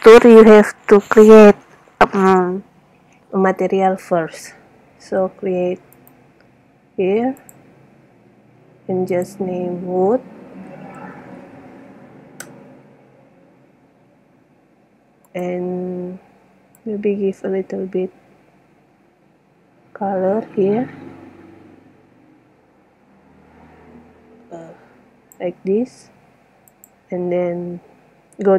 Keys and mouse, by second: 6.3 click, 7.7 click, 11.6 o, 14.9 middle click, 15.4 click, 16.0-16.5 middle drag, 17.1 middle click, 26.8-28.0 drag.